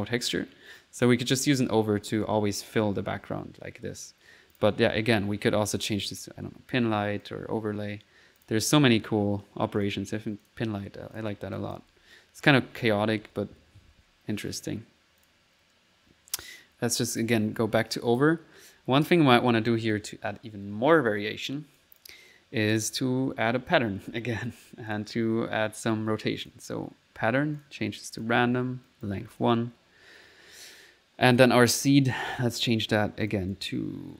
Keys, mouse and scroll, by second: 1.1 click, 1.1-3.2 typing, 4.6 click, 5.2 click, 5.4 typing, 6.1 click, 6.5 1, 7.3 click, 8.4 click, 9.5 1, 9.8 click, 10.5 click, 11.2-12.3 drag, 11.9-14.0 typing, 15.3 click, 15.7 click, 17.2 click, 17.6 typing, 17.9 click, 18.8-19.6 typing, 20.0 click, 21.8 click, 22.8 click, 23.2-24.1 typing, 25.0 click, 25.9 click, 26.5 click, 27.6 click, 28.2 click, 28.9 click, 30.1 middle click, 31.4 middle click, 31.9 click, 32.4 middle click, 33.3-34.1 drag.